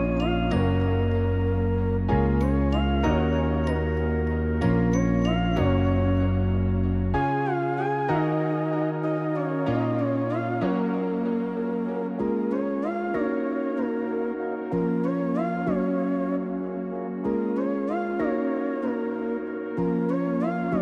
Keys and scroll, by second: 11.8-13.2 typing, 18.9 Return.